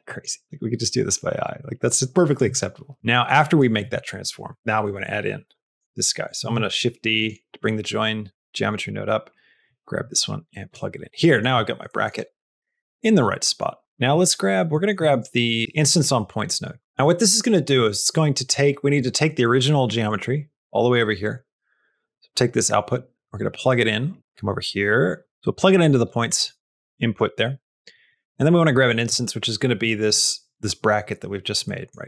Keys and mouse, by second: 0.4-2.2 shift+drag, 2.8 middle click, 3.4 click, 6.3 shift+d, 8.1 click, 9.4-10.6 drag, 11.0 middle click, 11.7 shift+middle click, 12.4 shift+middle click, 13.2 middle click, 14.1 middle click, 14.6 middle click, 15.0 shift+a, 15.6 Down, 16.8 click, 17.1 middle click, 17.8 click, 19.0 middle click, 19.4 middle click, 20.0 click, 20.7 middle click, 21.6 middle click, 22.6 click, 24.2-25.3 drag, 25.3 middle click, 26.2 middle click, 26.8 click, 27.9 middle click, 28.7 middle click, 31.6 middle click.